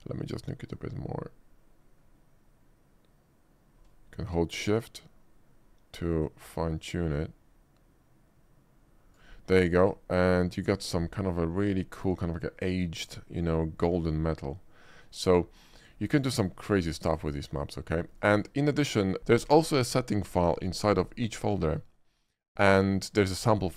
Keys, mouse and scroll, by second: 0.4-9.3 drag, 10.8 shift+middle click, 11.3-11.8 shift+middle drag, 12.4 shift+middle click, 12.9 shift+middle click, 13.9-15.6 shift+middle drag, 16.0 shift+middle click, 16.3 shift+middle click, 18.0-18.3 shift+middle drag.